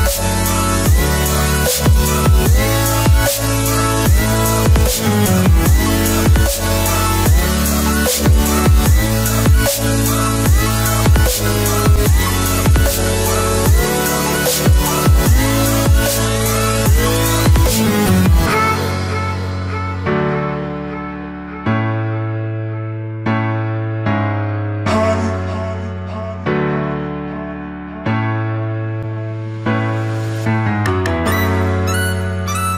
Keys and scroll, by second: 25.4 ctrl+z, 25.9 ctrl+alt+z, 32.3 ctrl+alt+z.